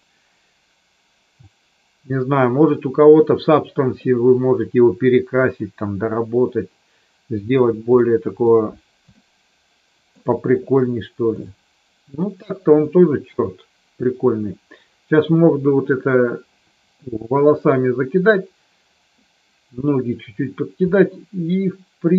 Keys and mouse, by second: 5.6-7.5 middle drag, 8.0 middle click, 9.1-10.1 shift+middle drag, 20.9-22.1 middle drag.